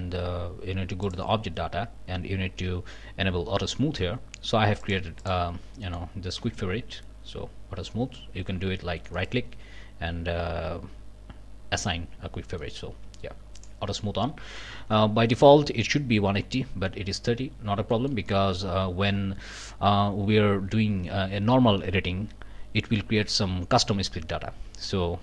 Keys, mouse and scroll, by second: 1.0 click, 4.8 click, 5.2 click, 5.8 click, 6.4 q, 9.1 click, 12.6 click, 13.0 q, 13.6 click, 14.1 scroll down 1, 17.5 scroll up 3, 17.9 shift+middle click, 18.5 shift+scroll down 3, 19.7-20.1 scroll down 2.